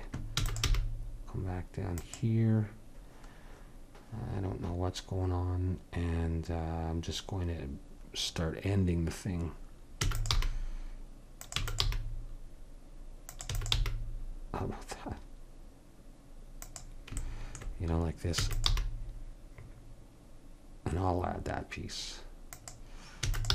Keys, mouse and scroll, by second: 0.4 e, 0.7 g, 8.3 middle click, 10.1 e, 10.4 g, 10.9 click, 11.6 e, 11.9 g, 13.5 e, 13.8 g, 18.4 e, 18.7 g, 23.3 e.